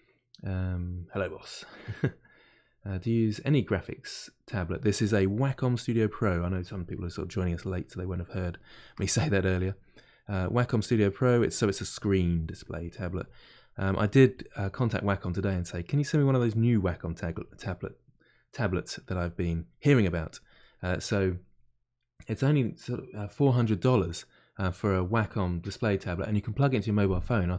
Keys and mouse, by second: 5.3 click, 6.3-7.8 middle drag, 7.8-8.9 drag, 8.9 middle click, 9.5 click, 9.9 middle click, 10.4 click, 10.9 middle click, 11.4 click, 12.3 middle click, 12.8 click, 13.5 middle click, 14.1-15.1 drag, 15.1-17.0 middle drag, 17.0-19.7 drag, 19.7 middle click, 20.3-27.5 drag.